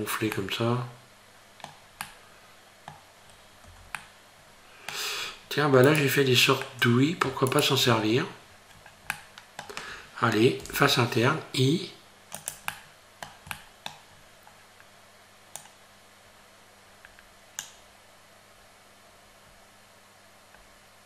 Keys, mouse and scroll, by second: 0.3 middle click, 2.0 middle click, 3.3 scroll up 2, 3.7 Tab, 4.0 middle click, 5.2 scroll up 2, 5.9 right click, 6.6 scroll up 1, 6.8 middle click, 7.5 shift+right click, 7.9 scroll down 3, 9.1 middle click, 10.7 i, 12.7 middle click, 13.5 middle click, 14.1-15.3 scroll up 1, 15.6 click.